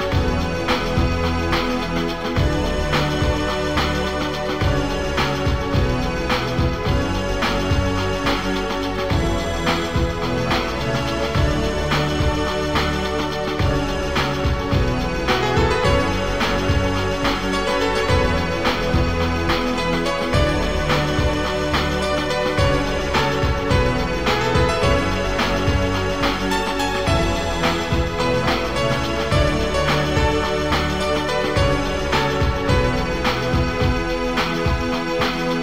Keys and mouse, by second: 1.2 click, 2.0 click, 4.9 Return, 8.4 click, 10.7 click, 11.2 click, 11.8 click, 13.2 Return, 14.8 ctrl+z, 15.5 click, 15.9 click, 18.8 click, 20.0 Return, 21.9 ctrl+z, 23.2 click, 24.0 click, 24.4 click, 26.4 click, 27.5 Return, 30.6 click, 32.3 click, 33.8 click, 34.8 click.